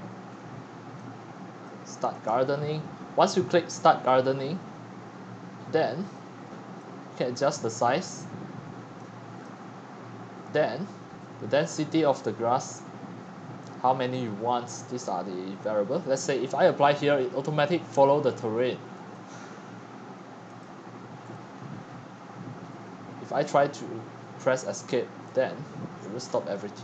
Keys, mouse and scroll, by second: 2.3-4.7 drag, 7.4-15.7 drag, 15.7-16.1 right drag, 16.1-24.9 drag, 24.9 Escape, 25.9-26.8 scroll down 24, 26.6-26.8 typing.